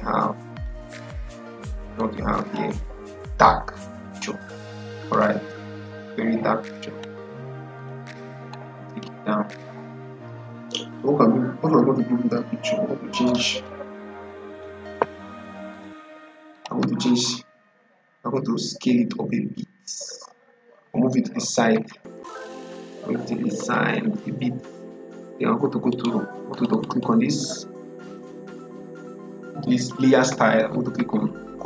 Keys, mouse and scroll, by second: 15.6 click, 16.7 click, 21.4 Left, 25.8 right click, 26.4 click.